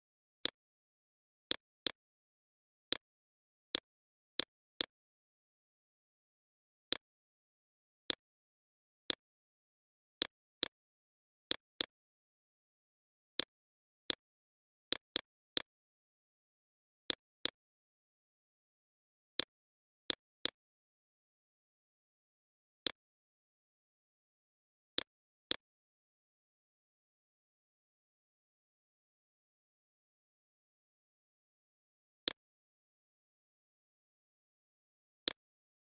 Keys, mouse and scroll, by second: 7.3-35.8 drag.